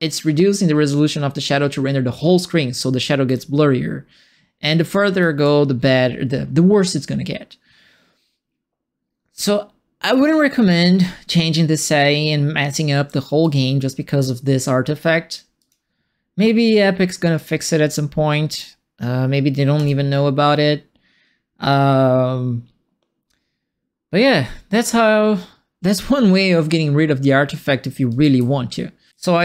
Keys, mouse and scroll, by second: 3.2-13.5 right drag, 3.3 s, 5.4 w, 15.5 click, 17.3 click, 18.4 click, 19.7 click, 25.9 click, 27.8-29.1 typing, 27.9-29.4 right drag.